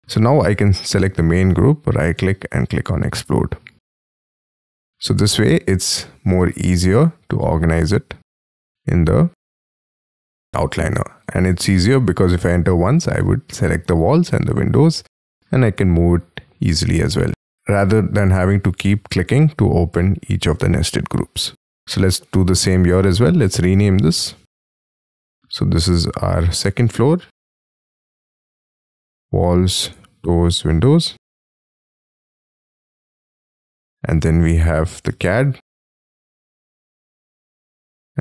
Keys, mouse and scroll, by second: 1.5 right click, 4.6-6.2 scroll down 6, 7.7-9.3 scroll down 2, 9.3-9.8 scroll up 6, 9.8-11.4 scroll down 5, 11.4 double click, 14.7 scroll up 5, 15.0 m, 16.8 ctrl+z, 17.3 space, 21.1 scroll down 8, 22.6-24.0 scroll up 1, 24.0 double click, 27.4-32.5 typing, 32.9 scroll up 2, 34.0 double click, 34.6-36.9 typing, 37.2-38.1 scroll up 2.